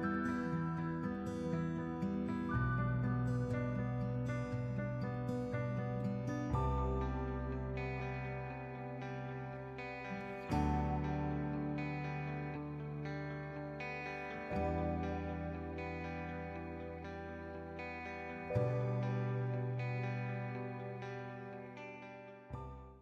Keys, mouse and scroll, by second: 0.4 x, 2.4-9.9 drag, 10.6 Tab, 11.4 shift+Left, 12.0 space, 14.4 shift+Left, 15.7 click, 17.2 space, 19.2 click, 21.5 space, 21.9 shift+Left.